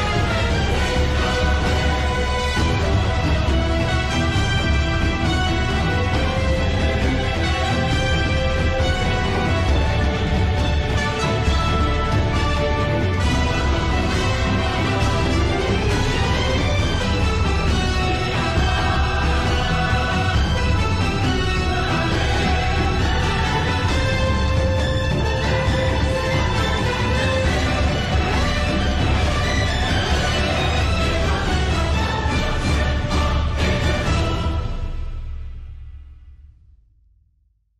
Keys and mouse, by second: 4.4-8.0 drag, 11.0-13.0 drag, 13.9 KP_0, 21.8-27.5 drag, 36.3 n.